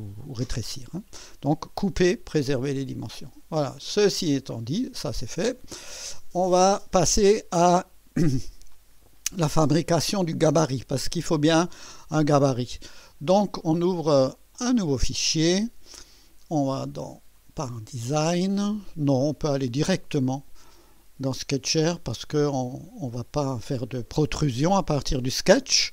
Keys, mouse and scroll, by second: 4.0 click, 10.5 scroll down 2, 14.6 click, 16.8 click, 17.4 click, 20.2 click, 22.2 click.